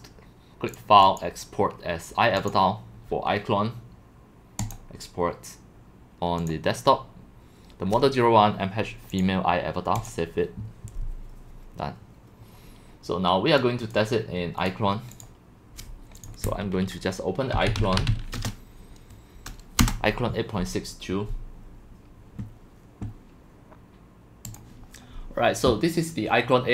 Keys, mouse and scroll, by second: 0.0-9.1 drag, 10.1 click, 14.7 click, 17.4-18.6 typing, 19.8 Return, 24.6-26.7 drag.